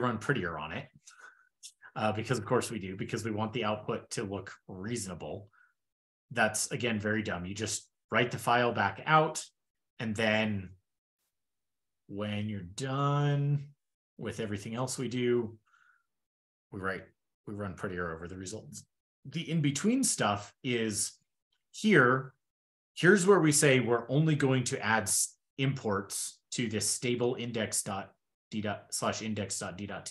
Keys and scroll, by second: 4.3 super+f, 4.6 super+g.